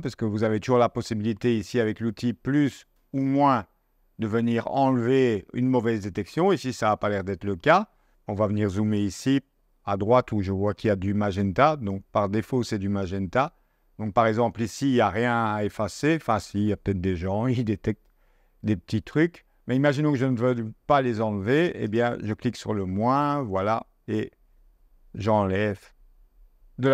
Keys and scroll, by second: 8.1 z, 10.6 space.